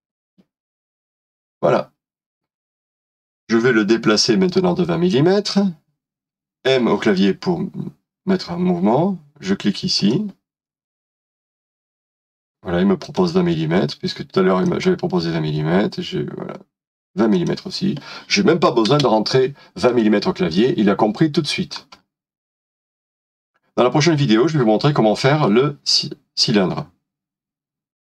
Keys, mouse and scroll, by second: 0.0-0.3 typing, 3.6 middle click, 7.1 m, 18.9 typing, 20.5 middle click, 21.9 scroll down 1, 24.0 middle click.